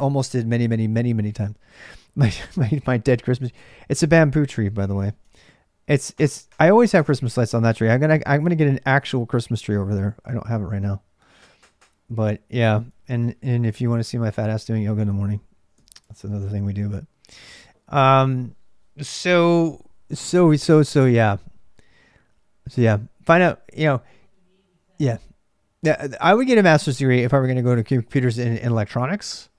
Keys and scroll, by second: 0.0-29.5 typing, 4.8 ctrl+alt+c, 15.5 ctrl+alt+m.